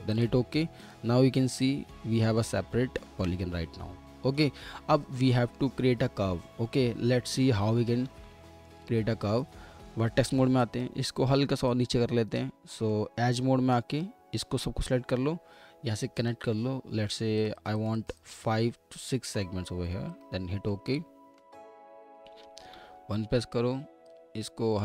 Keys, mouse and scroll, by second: 3.1 ctrl+z, 5.3 middle click, 7.6 alt+w, 8.4 middle click, 8.9-10.2 scroll up 1, 10.2 1, 12.7 middle click, 13.3 2, 17.5 click, 21.9-22.7 scroll up 1, 22.7 1.